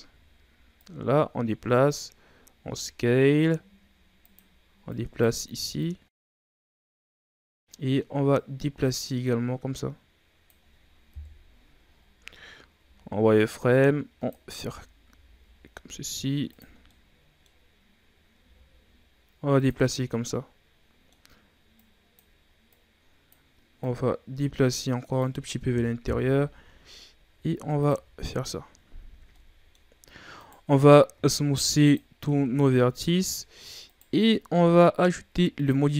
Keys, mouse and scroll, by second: 0.7-2.5 drag, 2.5 s, 4.8-6.5 drag, 6.5 scroll down 3, 6.7-8.2 middle drag, 8.2-11.0 drag, 11.0 KP_1, 12.0-12.7 ctrl+scroll up 5, 12.7 z, 13.5 click, 14.4 z, 15.0 s, 16.7 scroll down 2, 16.8 middle click, 17.7-18.3 scroll up 1, 18.3 s, 19.8-21.7 middle drag, 21.7-25.9 drag, 25.9 KP_1, 27.2 s, 27.8 Tab, 28.2-28.9 scroll down 5, 28.9 a, 29.3 middle click, 29.8-30.3 scroll up 3, 30.3 right click, 31.0 w, 32.1 a, 32.3 scroll down 3, 32.6-33.1 middle drag, 33.1-33.8 scroll up 2, 33.8 right click.